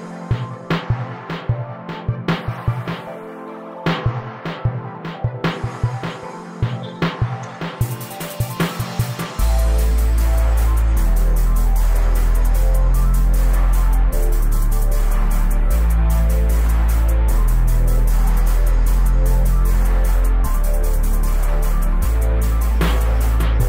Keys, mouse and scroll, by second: 0.1-0.6 scroll up 4, 0.1 shift+middle click, 0.6 right click, 1.2 f, 1.4 Tab, 1.5 scroll down 1, 1.6-2.1 scroll up 2, 1.7 Tab, 2.1 right click, 2.5 3, 2.6 scroll down 1, 2.8 shift+d, 5.5 Tab, 5.7 KP_0, 5.9 s, 8.0 middle drag, 8.8 right click, 9.0 KP_0, 9.4 shift+right drag, 9.7 g, 12.2 right drag, 12.5 g, 13.0 right click, 13.4 g, 15.0 Tab, 15.1 right click, 16.6 Tab, 16.7 shift+middle click, 17.6-18.3 scroll down 2, 17.8 KP_0, 18.3 Tab, 18.4 s, 18.8 Tab, 19.1 scroll up 4, 19.3 right click, 19.4 s, 20.9 right click, 21.0 Tab, 21.4 Tab, 21.5 right click, 21.7-22.3 scroll up 3, 21.8 middle click, 22.1 shift+middle click, 22.3 shift+middle click, 23.3 a, 23.5 g.